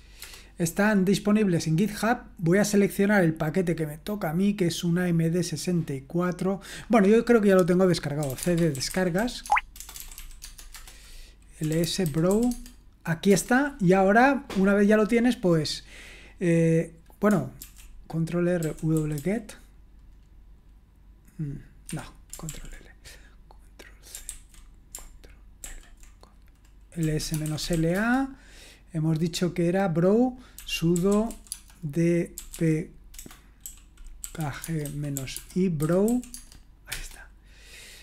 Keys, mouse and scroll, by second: 0.2 Return, 2.7-3.9 scroll down 1, 3.9-5.5 scroll down 1, 6.9 click, 8.0-13.8 typing, 17.6 ctrl+r, 18.4-19.6 typing, 21.9 Escape, 22.5 ctrl+l, 24.3 ctrl+c, 25.6 ctrl+l, 26.8-28.2 typing, 30.3-36.1 typing, 36.3 Tab, 36.9 Return.